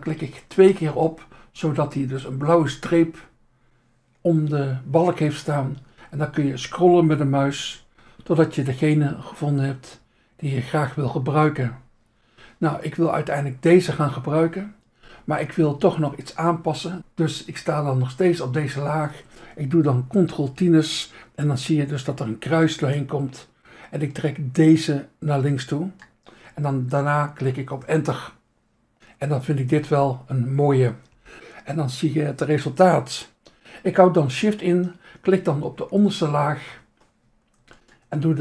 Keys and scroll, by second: 2.2 Insert, 17.0 Insert, 18.5 Insert, 20.7 ctrl+t, 27.8 Return, 36.6 Insert.